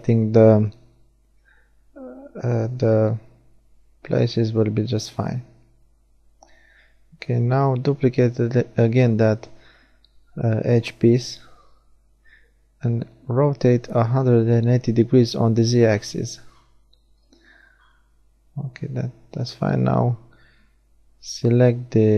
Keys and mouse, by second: 0.2 shift+d, 2.2 r, 9.5-13.1 right drag, 10.4 r, 15.9-18.0 right drag, 18.0 r.